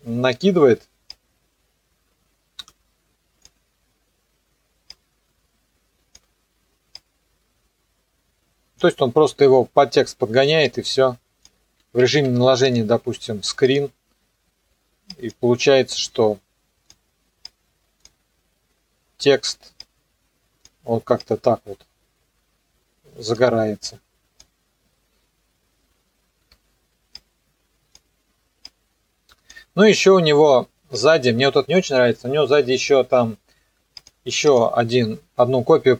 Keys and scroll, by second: 10.0 s, 12.1 F4, 26.5 p.